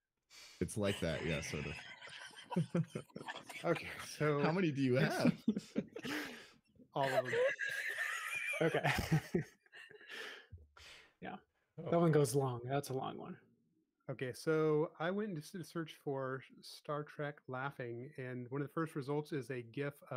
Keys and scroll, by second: 0.5 l, 2.8 typing, 4.2 typing, 11.6-12.2 typing, 14.4 l, 17.0 e.